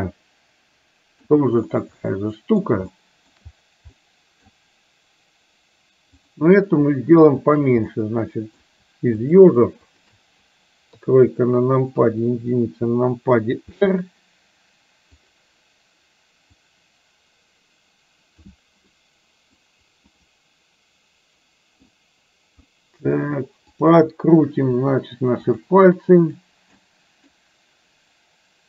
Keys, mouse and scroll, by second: 2.2-2.7 middle drag, 2.9-3.4 shift+middle drag, 4.1-4.4 middle drag, 6.2 click, 7.4 shift+click, 8.1 middle click, 9.2 shift+click, 10.1 shift+click, 10.9 KP_3, 12.1 KP_1, 13.8 r, 16.7-18.6 drag, 18.9-19.7 middle drag, 20.2-21.9 middle drag, 22.8 middle click, 23.7 click, 24.9 r, 26.2 click, 26.9 middle click.